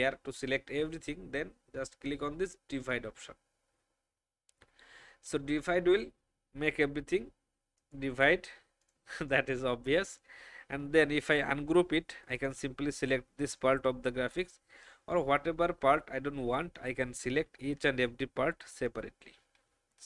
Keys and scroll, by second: 13.3 Delete, 16.5 alt+space, 17.5 alt+space, 19.8 Delete.